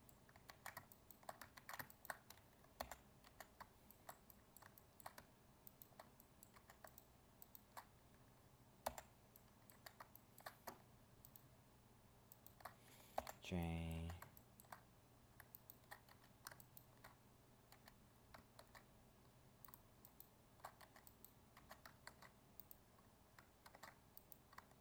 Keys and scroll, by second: 0.5 ctrl+z, 18.6 ctrl+Tab, 22.0 ctrl+Tab.